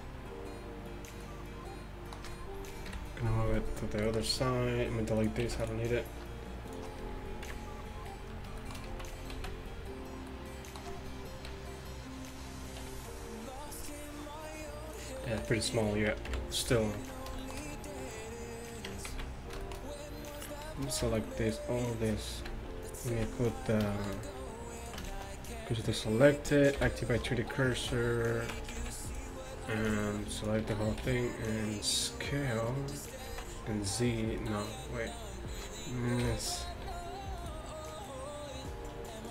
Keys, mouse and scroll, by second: 0.0 Tab, 2.9 KP_3, 5.5 x, 7.5 KP_1, 8.9 z, 9.4 z, 11.5 KP_3, 12.9 r, 16.3 KP_1, 19.0 Tab, 19.2 z, 21.1 b, 22.5 x, 25.7 shift+s, 26.8 ., 27.5 Tab, 27.9 z, 28.6 Tab, 28.8 z, 29.1 click, 29.9 b, 30.7 z, 31.1 s, 36.3 ,, 36.9 d, 38.1-39.3 middle drag.